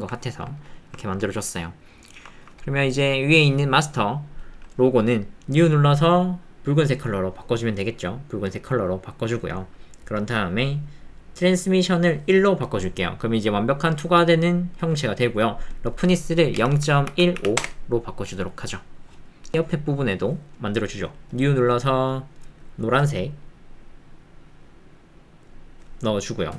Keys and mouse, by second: 0.2 ctrl+middle click, 0.7 shift+click, 1.0 ctrl+click, 1.5 click, 2.0 shift+click, 2.3 ctrl+click, 5.5 click, 6.2 click, 9.9 click, 11.9 click, 15.0 middle click, 15.8-17.8 drag, 22.1 middle click, 26.3 middle click.